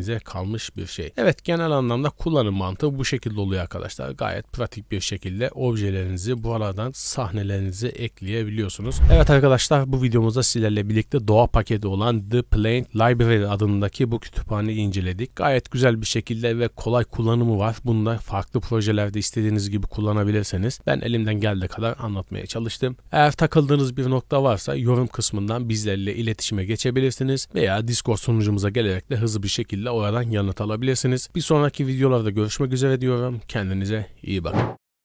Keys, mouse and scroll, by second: 0.6 right click, 1.7 click, 2.7 click, 5.1-5.4 scroll down 1, 6.2 click, 8.2 click.